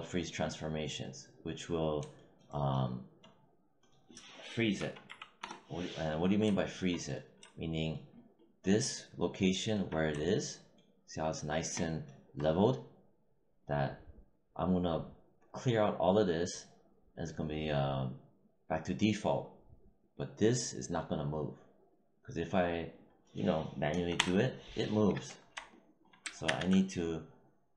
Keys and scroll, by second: 4.7 ., 4.9 5, 5.3 Return, 23.8 0, 24.1 Return, 26.4 ctrl+z.